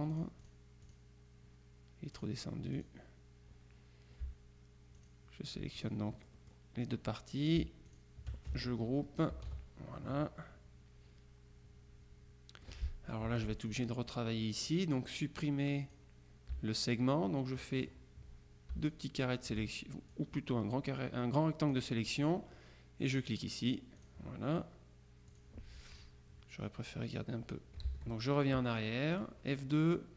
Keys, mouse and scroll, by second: 2.2 click, 5.1 shift+click, 5.9-7.1 drag, 7.9 shift+click, 9.4 ctrl+g, 10.0-13.3 ctrl+drag, 13.4 F2, 13.7 click, 15.5 click, 16.9-18.4 shift+drag, 19.0-20.1 drag, 20.2-22.3 drag, 23.3 click, 24.1 click, 25.4 click, 28.0 ctrl+z, 29.3 click.